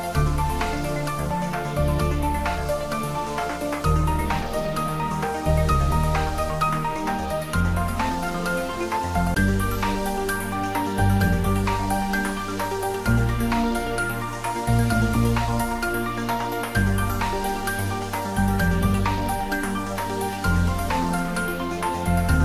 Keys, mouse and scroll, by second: 14.6-16.3 scroll up 1, 17.2-19.3 scroll up 1.